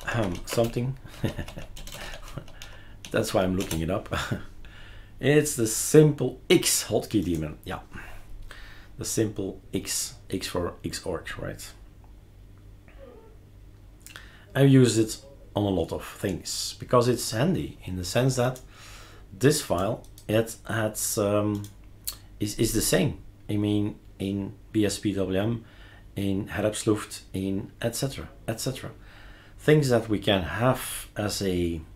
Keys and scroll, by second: 0.0-3.8 typing.